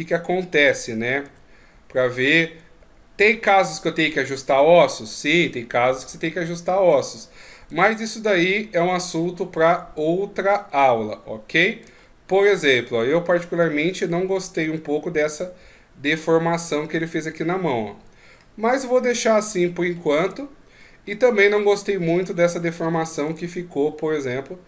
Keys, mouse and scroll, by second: 0.6 right click, 1.2 r, 3.2 right click, 3.7 right click, 4.5 r, 7.0 right click, 7.7 r, 12.0-12.6 shift+scroll up 1, 12.6 middle click, 14.6 r, 18.4 middle click, 19.6-19.9 shift+scroll up 1, 20.4 scroll down 4, 20.8 middle click, 22.0 shift+scroll down 1, 22.6 shift+scroll up 1, 23.3 right click, 24.1 r.